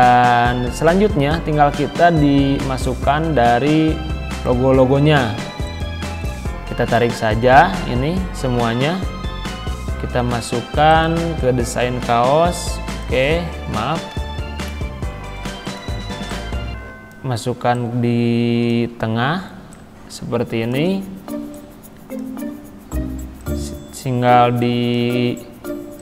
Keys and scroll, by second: 8.6 ctrl+c, 14.2 ctrl+v.